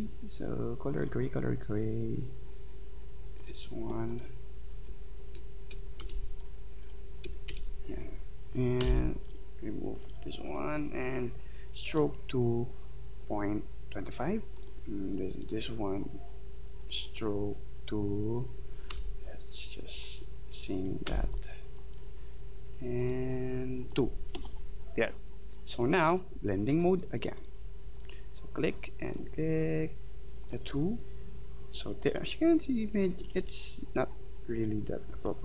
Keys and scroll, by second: 6.0 shift+x, 8.8 /, 18.9 |, 21.1 v.